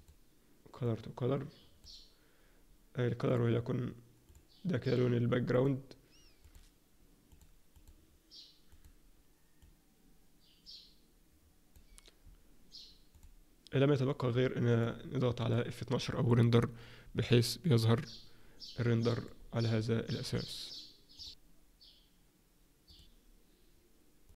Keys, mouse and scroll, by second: 0.8 click, 3.2 click, 4.3 click, 4.8 click, 5.5 click, 6.4 click, 7.3 click, 7.8 click, 8.6 click, 9.6 click, 13.1 click, 14.7 click.